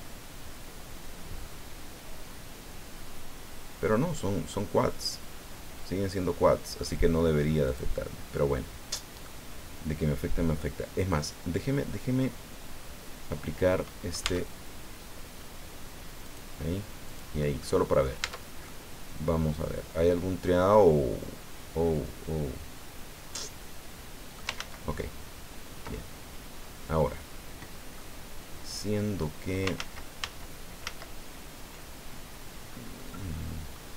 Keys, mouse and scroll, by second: 7.7 click, 8.3-9.4 drag, 14.2 Tab, 16.2 click, 17.0 click, 17.6 middle click, 18.2 Tab, 18.6-24.5 middle drag, 24.5 ctrl+z, 27.9-29.3 drag, 29.8 ctrl+z, 33.0 scroll down 2, 33.4 scroll up 2.